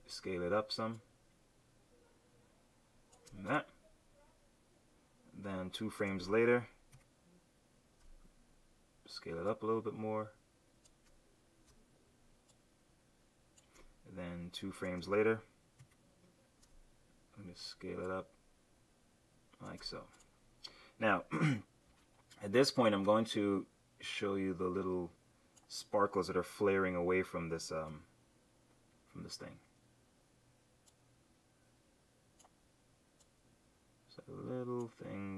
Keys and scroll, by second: 6.9 F6, 15.7 F6, 21.8 r, 27.8 v.